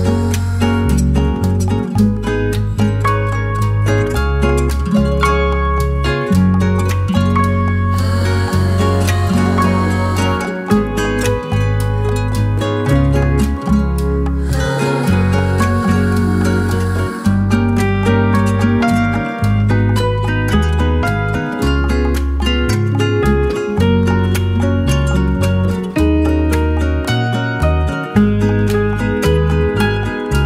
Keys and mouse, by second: 0.5 shift+middle click, 1.7 k, 10.0 shift+middle click, 10.7 shift+middle click, 11.2 shift+middle click, 11.7 shift+middle click, 13.0 k, 21.0 shift+middle click, 21.6 shift+middle click, 22.7 k.